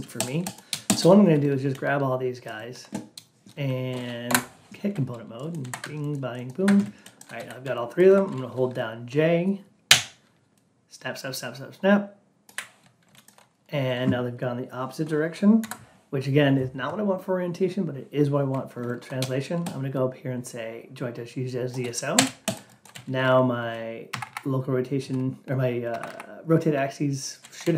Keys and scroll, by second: 4.2 F8, 15.5 F8, 23.5 Down, 24.0 Up, 25.4 Down, 25.8 Up, 27.5 ctrl+a.